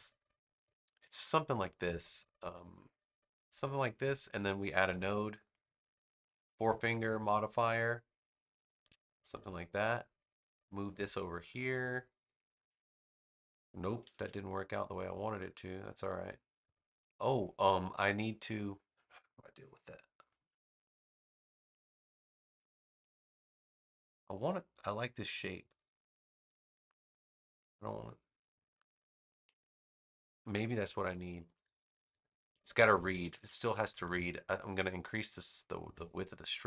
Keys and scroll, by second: 4.7 a, 14.0 super+z, 31.2 super+-, 33.1 super+=, 33.7 super+=.